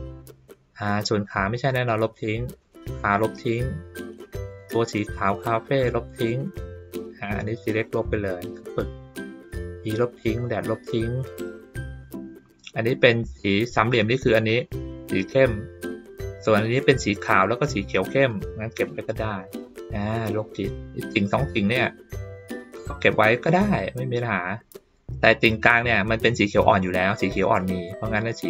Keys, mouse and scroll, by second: 1.1 click, 2.6 click, 4.4 click, 5.8 click, 7.2-8.0 drag, 9.5 click, 10.3 click, 18.3-18.8 drag.